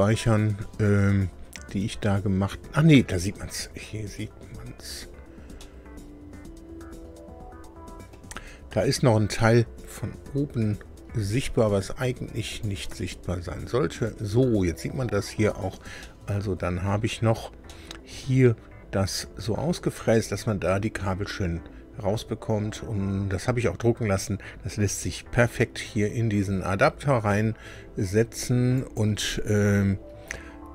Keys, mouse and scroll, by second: 4.0-4.6 scroll up 4, 5.2-5.5 scroll down 2, 5.6-8.3 middle drag, 9.8-10.5 scroll up 4, 10.8-11.1 scroll up 2, 12.5 click, 12.9 space, 14.8 scroll down 2, 16.0-17.0 middle drag, 17.2 scroll down 2, 17.6 middle click, 24.9-25.3 scroll up 2, 26.9 scroll down 2, 27.8 scroll up 2, 28.7 click, 29.4-30.5 scroll down 6.